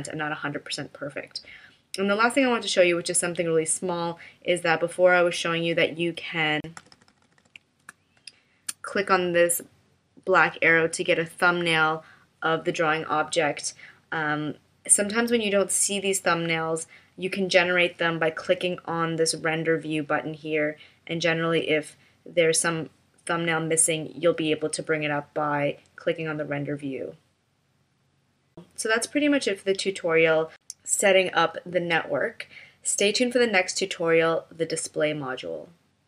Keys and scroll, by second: 6.8 super+=, 7.8 space.